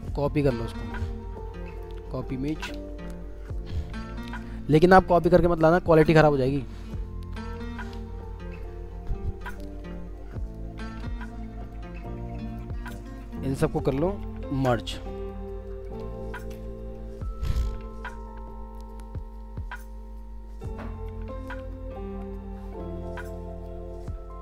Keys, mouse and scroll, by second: 4.6 ctrl+v, 5.7-6.2 alt+scroll down 2, 10.8 ctrl+z, 14.2 ctrl+e, 19.7-21.7 alt+scroll down 1.